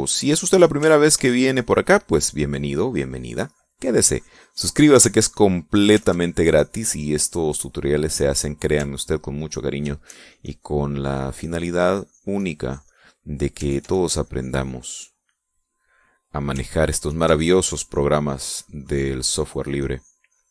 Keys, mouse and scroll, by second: 0.1 middle click, 1.7-6.4 ctrl+drag, 6.7-8.7 ctrl+drag, 10.3 ctrl+click, 10.7-13.8 ctrl+drag, 14.4-16.1 ctrl+drag, 16.2 middle click, 17.5 ctrl+click, 18.1-20.5 ctrl+drag.